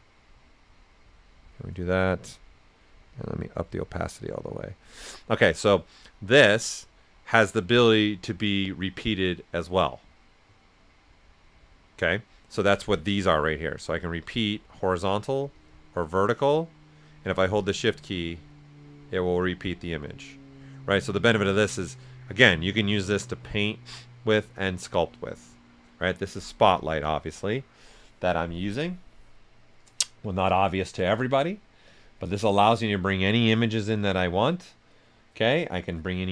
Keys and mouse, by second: 3.1 click, 3.4 l, 13.3-15.5 drag, 15.5-26.6 drag, 31.8 click, 35.7 click, 35.7 click.